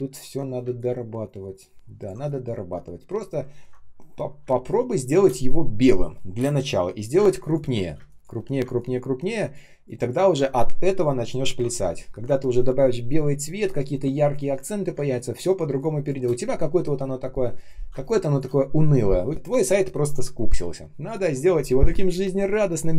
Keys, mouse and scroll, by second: 0.0 ctrl+scroll down 1, 0.5 space, 1.0 space, 3.5 ctrl+scroll down 1, 4.3 space, 4.8 space, 4.9 space, 7.1-9.1 typing, 14.8 space, 15.4 space, 17.8 space, 18.3 space.